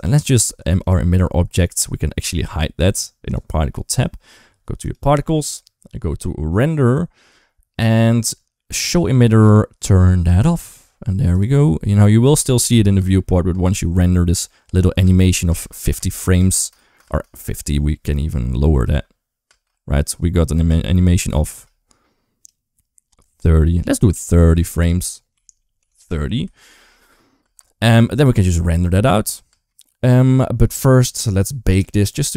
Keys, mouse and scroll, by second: 0.7 click, 4.7 click, 10.2 click, 11.3 right click, 11.5 ctrl+s, 12.2 click, 12.8 space, 13.3 space, 14.9-16.9 typing, 17.9-18.7 drag, 18.7 space, 19.3 space, 20.5 space, 21.0 space, 21.3 space, 22.3-24.0 drag, 24.7-25.8 drag, 26.5 ctrl+s, 27.2 space, 29.3 space.